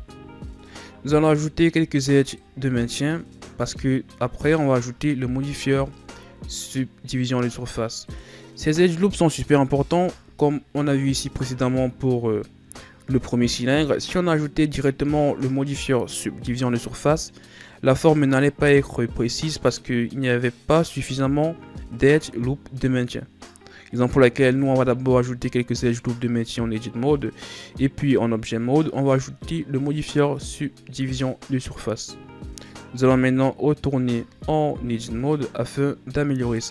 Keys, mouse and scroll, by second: 0.0 z, 1.8 ctrl+r, 5.2 ctrl+r, 9.8 Tab, 28.8-32.0 drag, 33.4-33.9 scroll up 1, 33.9 Tab, 34.6-36.3 scroll up 2, 36.3-36.7 middle drag.